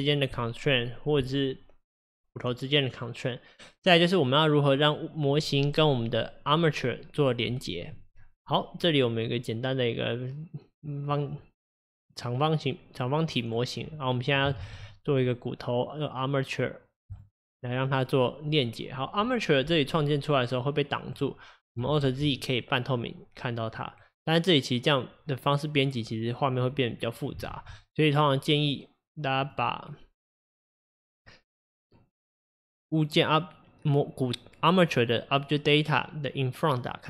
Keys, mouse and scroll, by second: 9.3-11.3 middle drag, 11.3-12.3 scroll up 1, 12.3-12.8 scroll down 2, 12.8-14.6 middle drag, 14.6 shift+a, 20.0-22.0 middle drag, 22.0 alt+z, 27.5 alt+z, 29.5-32.5 drag, 36.8 click.